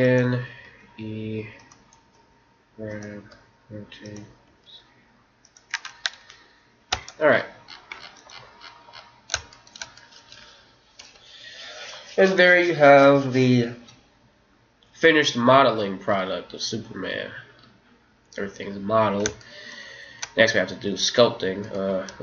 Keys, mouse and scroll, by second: 0.7 e, 2.2 g, 3.3 r, 4.5 s, 6.8 Tab, 7.2-8.6 middle drag, 9.5-11.8 middle drag, 10.9 KP_1, 15.6-21.3 middle drag, 21.6 right click, 22.1 Tab.